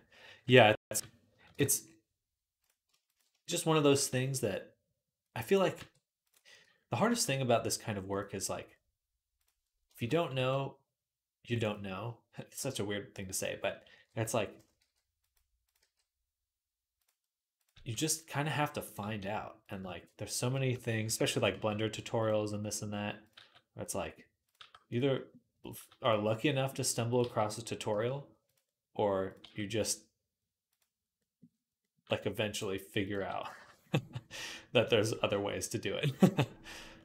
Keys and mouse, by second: 0.8 KP_3, 1.3 shift+Tab, 3.8 e, 4.3-15.4 middle drag, 5.6 r, 6.9 g, 9.8 shift+Tab, 10.1 g, 12.4 g, 13.7 ., 14.6 g, 15.4 click, 15.5-18.6 middle drag, 15.6 g, 17.5 g, 18.6 click, 18.7-25.4 middle drag, 18.9 g, 20.5 ., 21.3 g, 23.1 g, 24.4 g, 25.4 click, 25.6-37.0 middle drag, 25.6 g, 27.0 g, 27.7 g, 29.1 click, 29.1 right click, 29.2 g, 31.9 g, 32.9 g, 36.9 shift+Tab.